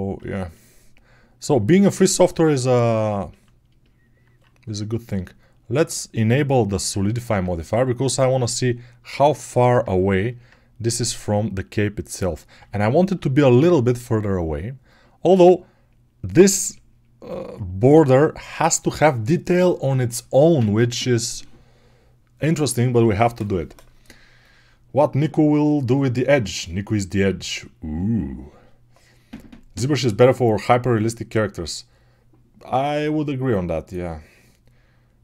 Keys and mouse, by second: 0.3 alt+right click, 0.4 alt+click, 0.7 alt+right click, 1.0 alt+click, 1.4 alt+right click, 1.6 ctrl+alt+shift+click, 1.9-3.7 alt+shift+middle drag, 3.7-5.8 alt+right drag, 5.8-8.1 alt+middle drag, 8.1-10.4 drag, 15.4-27.4 drag, 27.4-35.2 right drag.